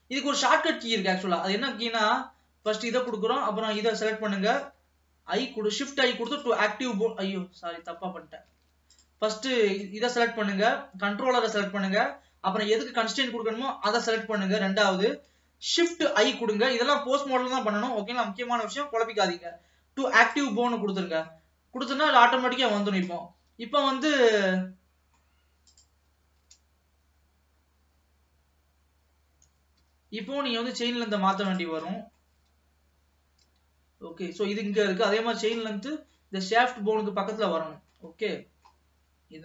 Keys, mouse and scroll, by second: 0.0-1.3 drag, 2.7 click, 3.8 shift+click, 5.2 shift+i, 7.4 ctrl+z, 8.0 ctrl+z, 9.0 click, 9.7 click, 11.8-13.8 middle drag, 13.8 shift+click, 16.0 shift+i, 21.5-25.8 middle drag, 25.8 click, 26.7 g, 30.6 middle click, 31.5 click, 32.0 middle click, 32.5 g, 35.6-38.3 middle drag, 38.3 scroll up 1, 38.5-39.4 middle drag.